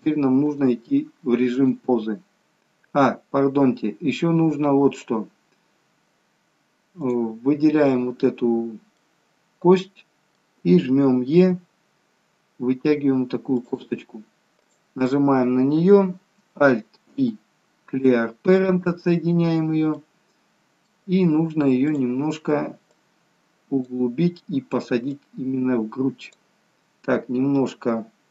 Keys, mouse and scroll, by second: 1.6 click, 3.5-4.6 scroll up 1, 4.6-4.9 scroll up 1, 4.9 click, 7.0 click, 9.2 middle click, 11.3 e, 17.1 alt+p, 19.3-19.9 scroll down 1, 19.9 middle click, 19.9 scroll down 1, 21.9 click, 23.0 click, 25.2 click.